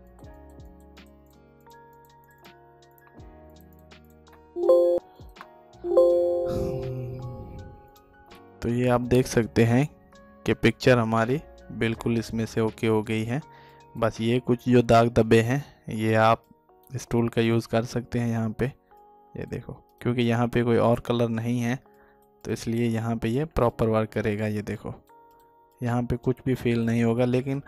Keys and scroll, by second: 3.9 alt+space, 27.3 alt+space.